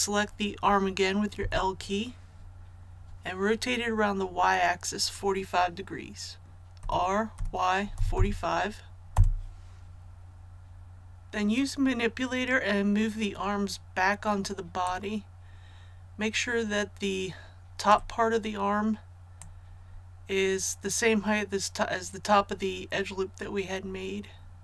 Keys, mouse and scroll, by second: 6.7 r, 7.3 y, 7.9 KP_4, 8.1 KP_5, 9.0 Return, 14.8-24.6 drag.